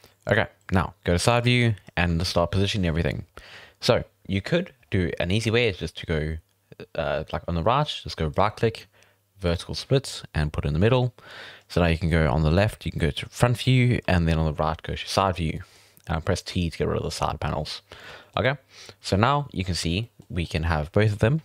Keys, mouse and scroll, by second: 1.3-2.9 scroll up 6, 1.5-1.8 shift+middle drag, 2.9-3.3 scroll up 1, 3.3-6.4 scroll down 2, 8.3-14.2 right drag, 14.2 t, 14.9-15.3 scroll down 1, 15.3 scroll up 1, 15.5 middle click, 15.8 t, 18.0 shift+middle click, 18.9-20.0 scroll up 1, 20.0-21.4 shift+middle drag.